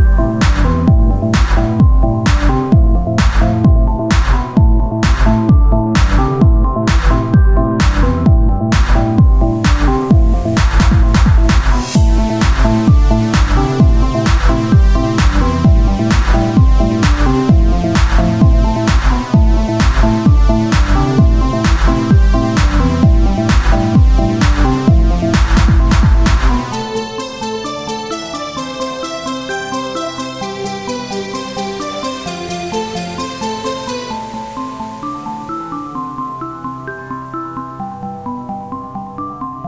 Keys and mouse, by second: 0.5-2.2 drag, 1.0 right click, 2.2 Tab, 2.5 z, 4.7 Tab, 5.4-8.6 drag, 7.2-8.4 right drag, 8.4 s, 9.6 Tab, 12.1 ctrl+r, 13.6 s, 15.0 Tab, 17.3-20.7 drag, 21.0 right click, 22.7 ctrl+r, 24.3 s, 26.9 s, 28.4 Tab.